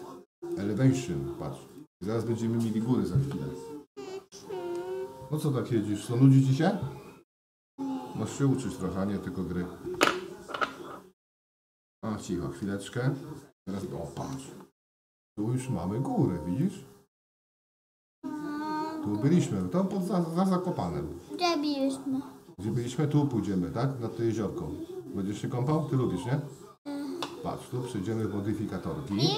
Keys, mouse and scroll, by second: 16.6-19.6 middle drag, 20.4 shift+middle click, 21.8-22.9 middle drag.